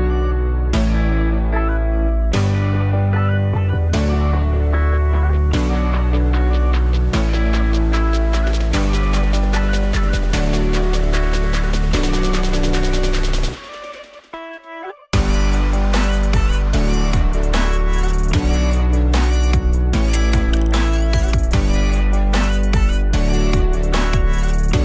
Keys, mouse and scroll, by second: 0.7 KP_1, 2.3 1, 3.8 click, 6.8 click, 12.0 alt+click, 12.9 alt+middle click, 13.3 alt+click, 16.4 click, 18.1 alt+click, 18.8 Tab, 19.1-20.6 alt+drag, 20.8-23.2 alt+drag, 24.1-24.8 alt+drag.